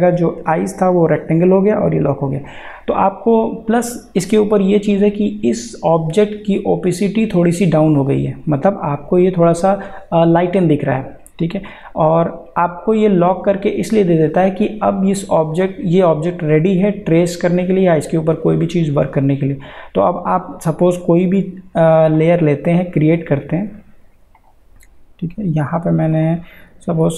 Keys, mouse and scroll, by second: 5.5 click, 22.1 click, 24.4 click.